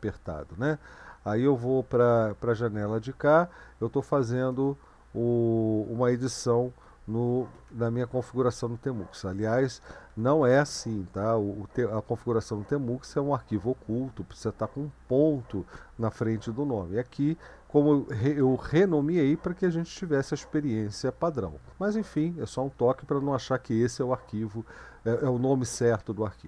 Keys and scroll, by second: 2.0 ctrl+b, 2.8 Left, 3.7-4.8 typing, 6.6-7.5 typing, 7.6 Tab, 8.7-9.7 Left, 10.1 Right, 13.8 Left, 14.1 Right, 17.4 End, 18.3 BackSpace.